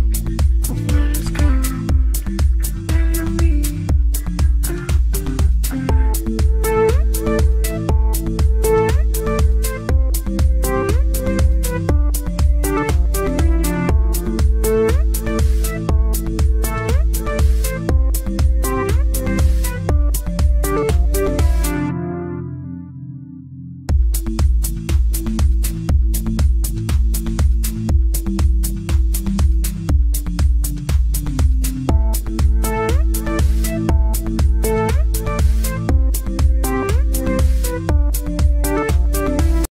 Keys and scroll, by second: 3.6 ctrl+g, 11.2 m, 11.4 u, 11.6 l, 12.2 BackSpace, 15.5 c, 15.7 o, 16.4 b, 31.2 F3, 31.5 Escape, 32.7 F9, 33.2 F9, 34.2 shift+F2, 34.9 F9.